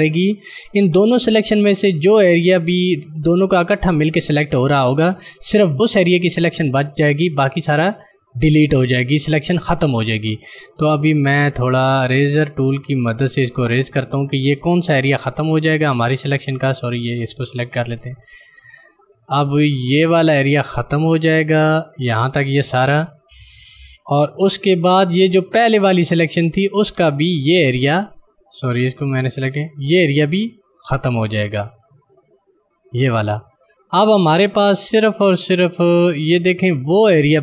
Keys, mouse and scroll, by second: 12.8 click, 20.0 click, 27.3 click.